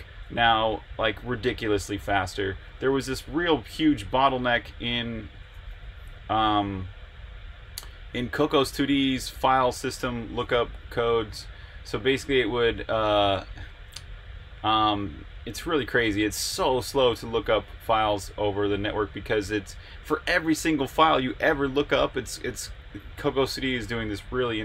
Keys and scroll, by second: 2.9 super+Tab, 5.7 super+q, 12.7 super+Tab.